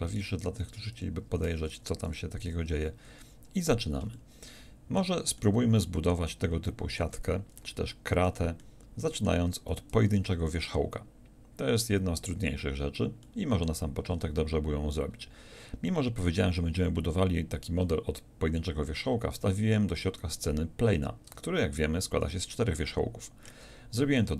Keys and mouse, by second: 0.7 b, 2.5 n, 3.7 click, 9.9 shift+a, 21.3 Tab.